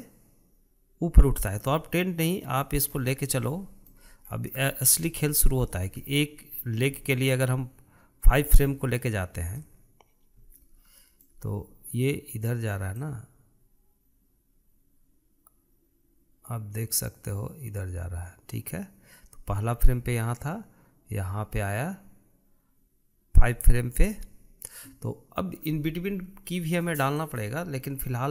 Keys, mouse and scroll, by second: 3.6-4.1 scroll up 3, 4.1-4.9 shift+middle drag, 4.9-5.3 scroll up 2, 5.3-8.1 shift+middle drag, 8.1-11.0 drag, 11.2-13.8 shift+middle drag, 13.8-16.7 drag, 27.9-28.3 drag.